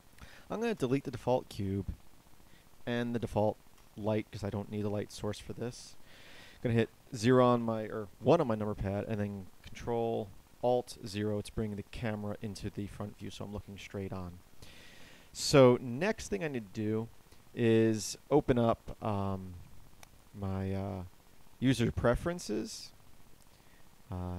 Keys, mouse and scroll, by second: 0.2 Delete, 6.7 KP_0, 8.1 KP_1, 10.9 ctrl+alt+KP_0.